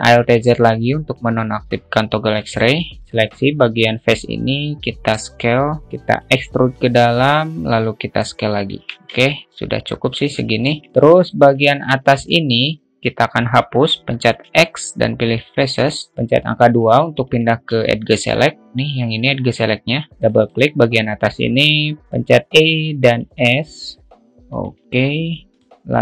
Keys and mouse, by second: 0.6 alt+z, 1.0 alt+middle click, 9.3 Tab, 9.7-10.6 alt+middle drag, 10.8 middle click, 10.9 `, 11.1 alt+shift+middle drag, 11.4 `, 11.6-12.0 alt+middle drag, 12.6 Tab, 13.2 click, 15.0 x, 17.9 middle click, 18.3 middle click, 20.9 click.